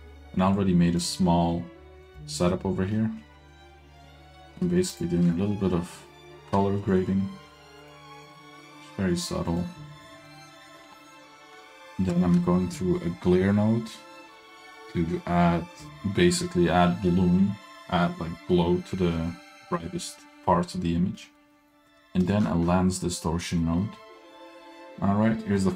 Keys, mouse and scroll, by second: 0.9 click, 1.5 g, 2.6 middle click, 3.2-3.5 scroll up 1, 3.5 middle click, 5.1 ctrl+shift+click, 6.0 middle drag, 7.0 ctrl+shift+click, 8.0 ctrl+shift+click, 8.6 middle click, 9.6 drag, 10.3 click, 11.0-11.3 middle drag, 12.3 ctrl+shift+click, 20.7 middle click, 21.4 middle click, 21.6 scroll up 1, 22.4 ctrl+shift+click, 23.5 scroll up 2, 23.7-24.0 middle drag.